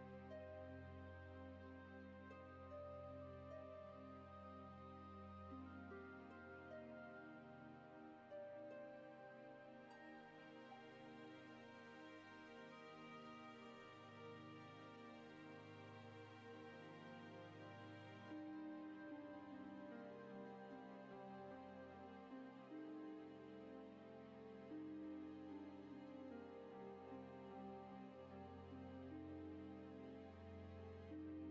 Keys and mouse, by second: 0.0 right click, 0.1 click, 1.4 shift+middle click, 6.1-7.2 drag, 8.5-13.7 drag, 14.1 ctrl+s, 16.9 n, 16.9 F6, 17.3 KP_1, 18.0 shift+middle click, 18.6-21.2 middle drag, 22.6 click, 24.9 click, 27.3-28.4 drag, 29.5 ctrl+z, 30.1 click.